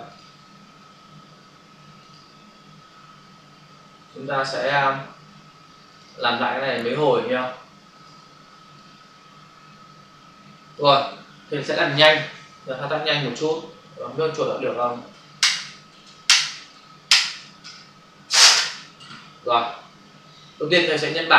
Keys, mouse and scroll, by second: 0.0 click, 2.0 click, 4.4 click, 4.7 double click, 6.0 click, 6.2 double click, 7.5 click, 8.8 click, 14.0 v, 20.9 click.